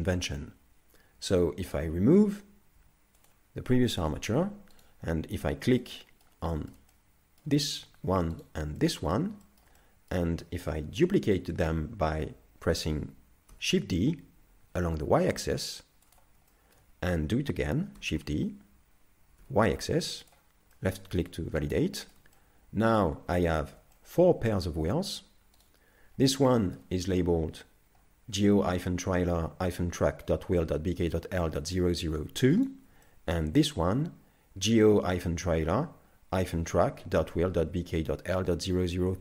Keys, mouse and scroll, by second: 1.7 right click, 2.8 x, 4.8 right click, 5.8 middle click, 6.5 shift+middle click, 6.9 middle click, 8.4 shift+right click, 8.8 middle click, 9.5 shift+middle click, 9.8 middle click, 10.7-11.1 scroll down 2, 11.1 shift+middle click, 13.5 shift+d, 16.5 shift+middle click, 18.0 shift+d, 20.7 middle click, 21.5-22.1 scroll up 2, 22.0 shift+middle click, 22.4 middle click, 23.2 scroll down 2, 23.6 shift+middle click, 23.9 middle click, 25.6 right click, 26.2 scroll up 2, 26.5 shift+middle click, 31.4 shift+middle click, 32.6 right click, 33.0 shift+middle click.